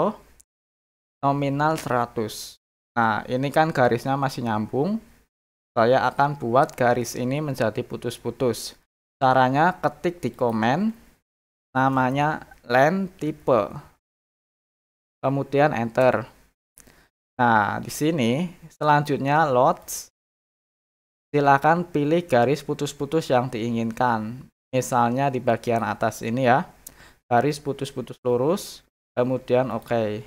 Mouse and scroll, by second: 10.3 click, 19.8 click, 23.1-23.5 scroll down 4, 23.9 scroll up 2, 25.6 click, 29.7 click.